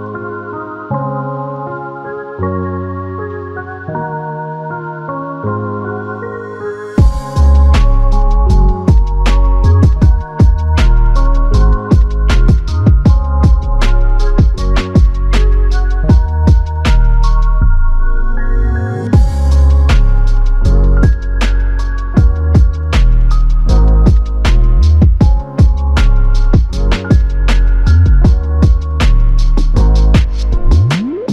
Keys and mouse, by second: 10.8 alt+click, 14.1 double click, 26.4 alt+click, 28.3 double click.